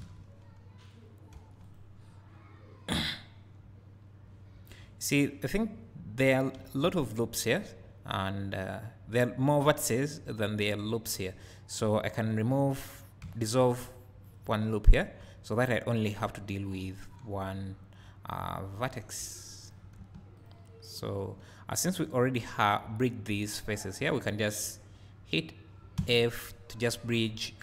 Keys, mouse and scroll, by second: 4.0 click, 20.4 click.